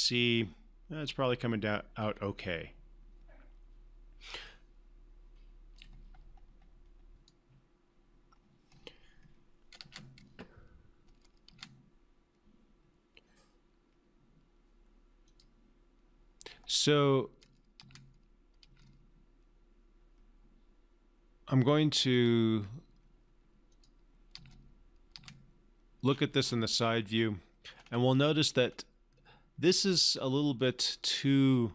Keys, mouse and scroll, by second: 10.3 space, 15.7 click, 18.1 space, 22.5 click, 24.7 space, 26.5 scroll up 1.